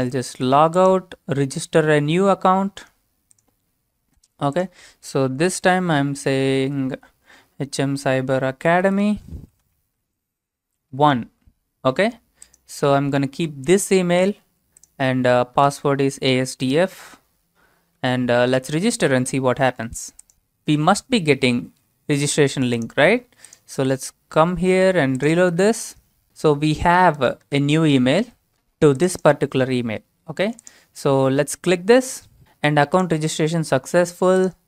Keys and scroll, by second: 5.3-6.8 typing, 8.3-10.9 typing, 13.3 ctrl+v, 15.3-16.2 typing.